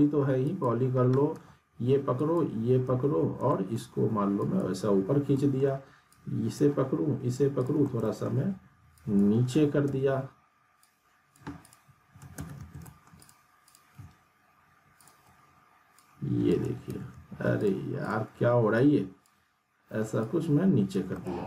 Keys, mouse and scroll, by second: 0.4 click, 1.3 ctrl+z, 2.1 ctrl+click, 2.9 ctrl+z, 3.4 scroll down 1, 3.5 alt+middle click, 4.4 click, 5.2 scroll up 1, 5.3 alt+middle click, 6.1-6.7 drag, 8.0 alt+middle click, 9.0 click, 9.8 ctrl+z, 10.8-11.5 click, 12.4 ctrl+z, 12.8 middle click, 13.2 click, 15.0 ctrl+click, 16.0-16.6 click, 16.9 ctrl+z, 17.6 click, 18.7-19.3 ctrl+drag, 21.1-21.4 alt+middle click.